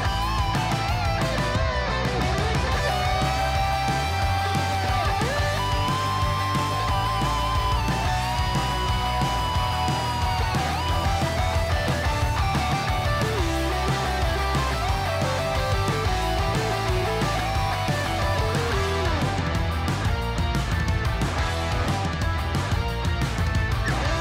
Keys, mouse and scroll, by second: 0.3-1.4 typing, 4.7 click, 5.3-10.9 middle drag, 11.4 click, 14.8 KP_1, 17.4 ctrl+z, 18.4 ctrl+z, 19.5 middle click, 20.9 middle click, 22.8 shift+click, 23.9-24.2 typing.